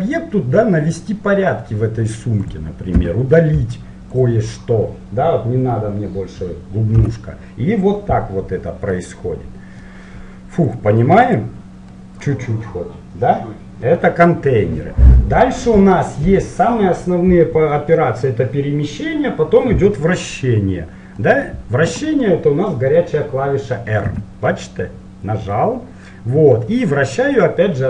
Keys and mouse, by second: 3.2 Delete, 7.2 Tab, 9.0-10.8 middle drag, 10.8-12.1 drag, 12.1 middle click, 12.4 click, 12.7-13.9 middle drag, 21.4-23.2 middle drag, 24.3 r.